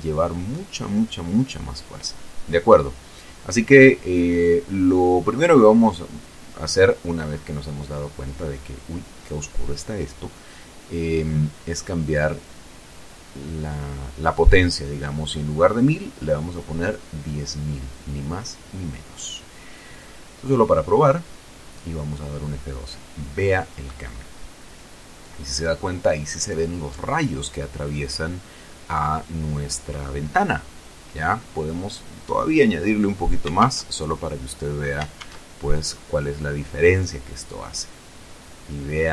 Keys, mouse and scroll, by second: 0.8 scroll down 2, 1.4 scroll up 2, 2.6 KP_0, 4.1-5.2 scroll up 4, 9.4 scroll down 2, 11.7 right click, 12.4 right click, 14.1 click, 15.6 End, 15.9 BackSpace, 16.6 Delete, 16.7 End, 17.7 BackSpace, 20.0 Home, 20.7 Return, 21.7 F12, 29.9 click, 31.1 Home, 31.6 Delete, 32.6 KP_2, 32.7 KP_Enter, 35.0 F12.